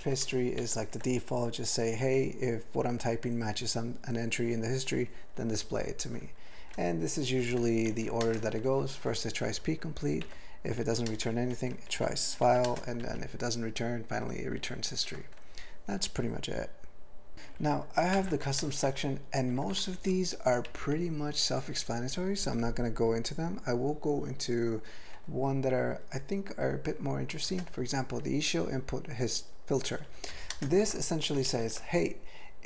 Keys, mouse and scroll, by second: 0.0 ctrl+f, 0.6 ctrl+alt+f, 6.7-7.4 alt+b, 7.6 alt+b, 8.3 ctrl+space, 8.6 ctrl+alt+f, 10.2 ctrl+g, 10.8 ctrl+f, 11.1 ctrl+space, 11.5 ctrl+alt+f, 11.9 ctrl+g, 12.5 ctrl+f, 12.7 ctrl+space, 13.0 ctrl+alt+f, 14.6 ctrl+g, 17.3 ctrl+l, 17.5 ctrl+n, 17.7 ctrl+n, 18.1 alt+m, 18.4 ctrl+p, 18.6 ctrl+space, 18.9-19.6 ctrl+n, 19.8 ctrl+n, 20.7 ctrl+g, 21.3 ctrl+p, 21.4 ctrl+p, 21.6 ctrl+p, 21.7 ctrl+p, 21.9 ctrl+p, 22.0 ctrl+p, 27.5 ctrl+space, 27.5 ctrl+e, 30.0 ctrl+g, 30.3 ctrl+b, 30.5 ctrl+space, 30.8 ctrl+alt+b, 31.5 ctrl+g.